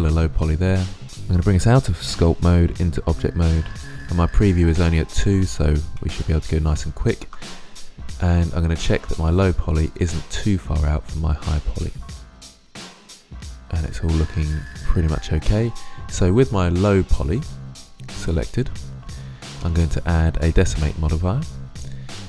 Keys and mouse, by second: 3.3 click, 6.0-7.8 middle drag, 9.0-10.7 drag, 10.7-11.1 middle drag, 11.8-13.3 middle drag, 13.9-14.4 middle drag, 14.4-15.8 drag, 17.6-18.9 drag, 19.5-21.6 drag.